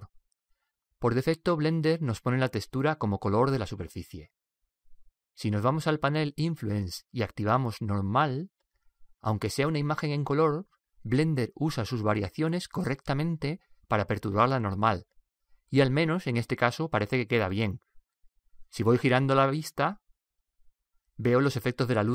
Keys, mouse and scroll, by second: 4.5 click, 8.9 click, 11.3-13.7 middle drag.